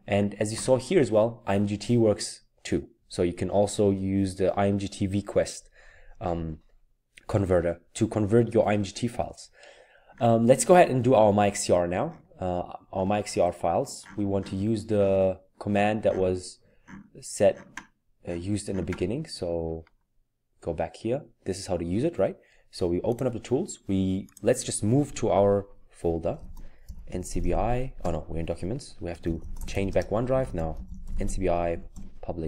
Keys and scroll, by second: 26.0-32.4 typing, 29.8 Return.